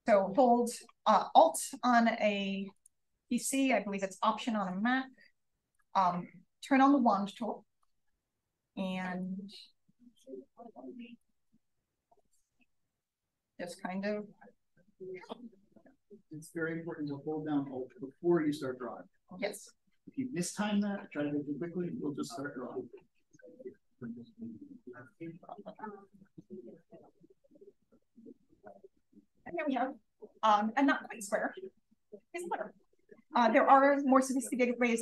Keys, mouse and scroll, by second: 2.2 BackSpace, 3.1 click, 4.7-6.2 alt+drag, 9.2 click, 10.3 BackSpace, 11.5 click, 12.7-26.6 alt+drag.